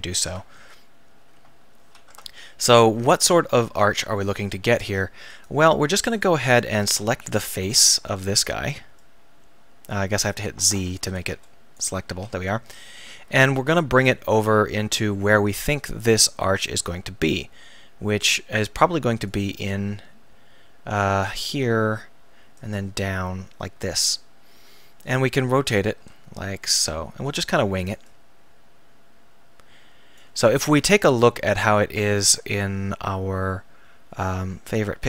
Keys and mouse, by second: 2.1 Tab, 3.4 KP_1, 7.1 KP_1, 7.7 a, 8.1 b, 10.7 z, 11.1 a, 11.3 b, 12.2 z, 19.3-21.0 right drag, 22.6-24.1 right drag, 26.0 r, 27.4-30.2 drag.